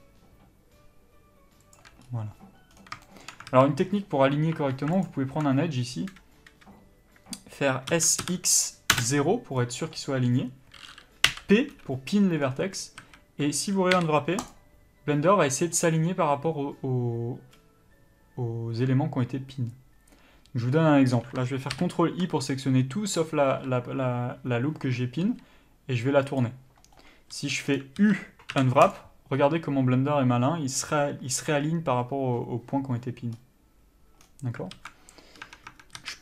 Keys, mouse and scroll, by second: 3.7 alt+a, 5.3 alt+click, 8.3 s, 11.5 p, 13.2 a, 14.8 u, 22.0 ctrl+i, 25.5 r, 27.6 a, 28.0 scroll down 1, 28.3 a, 29.2 u, 35.0 alt+a, 35.7 Tab.